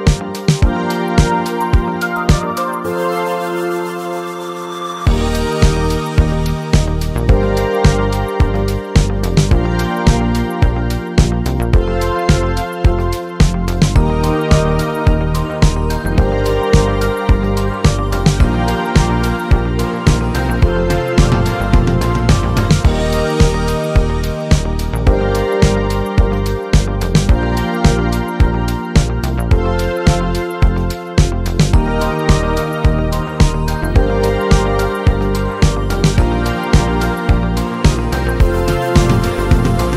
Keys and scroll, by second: 2.5 Delete, 4.4 z, 5.4 space, 16.3 ctrl+j, 32.3 ctrl+g, 35.6 z.